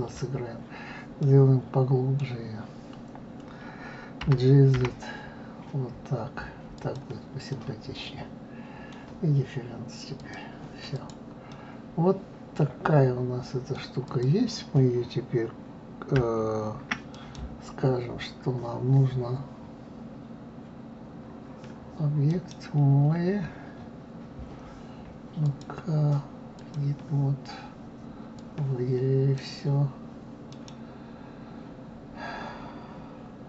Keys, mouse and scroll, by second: 1.2-4.2 middle drag, 4.2 g, 7.5-10.2 middle drag, 10.2 click, 10.9 click, 11.5-14.1 middle drag, 14.1 click, 17.1-25.3 right drag, 25.4-28.4 drag.